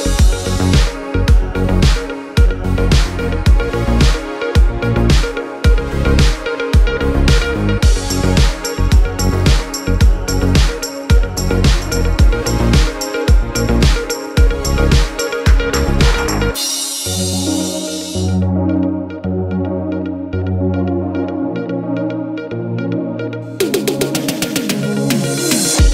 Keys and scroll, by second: 21.1 5, 21.4 Return.